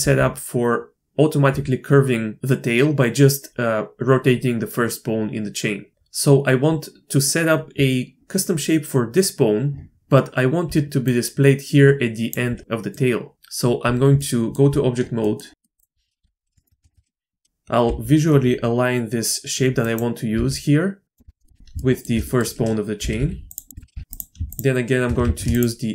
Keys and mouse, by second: 0.0 r, 10.6-12.6 d, 11.0-12.3 drag, 12.9 middle click, 13.3 Tab, 14.1-14.5 drag, 15.2 drag, 15.5 click, 16.2 KP_7, 16.6 shift+click, 16.8 shift+click, 17.8 g, 20.3 s, 21.2 KP_Enter, 21.4 middle click, 21.7 shift+middle click, 22.2 middle click, 23.0 g, 23.7 shift+click, 23.9 g, 24.5 shift+click, 25.2 ctrl+z, 25.6 shift+click.